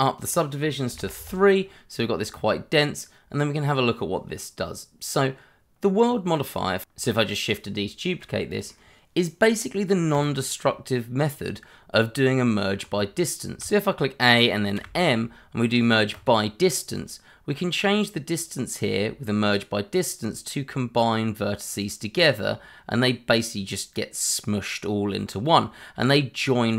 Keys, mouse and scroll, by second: 0.9 3, 1.1 Return, 1.9-2.7 scroll up 1, 2.7 middle click, 4.7-6.0 scroll up 1, 6.2 scroll down 1, 6.5 middle click, 6.9 shift+middle click, 7.1 shift+d, 7.4 y, 8.1 click, 8.5 shift+middle click, 9.0 click, 12.0 Tab, 13.6 a, 14.7 m, 16.1 click.